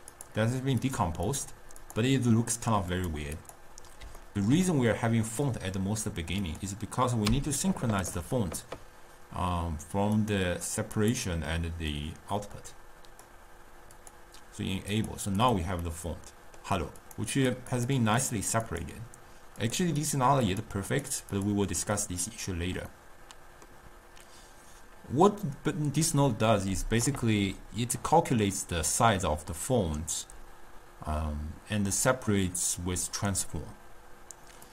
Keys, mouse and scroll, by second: 0.2 click, 0.9 click, 1.4 click, 1.9 click, 3.0 click, 3.4 click, 4.6-6.5 ctrl+middle drag, 6.5 click, 7.3 u, 12.1 click, 14.4 click, 15.0 click, 15.5 click, 15.9-17.1 middle drag, 17.1 click, 17.4 click, 17.8 click, 18.3 click, 18.7 click, 19.7 click, 20.0 click, 20.5 click, 21.0 click, 21.4 click, 23.0-26.0 middle drag.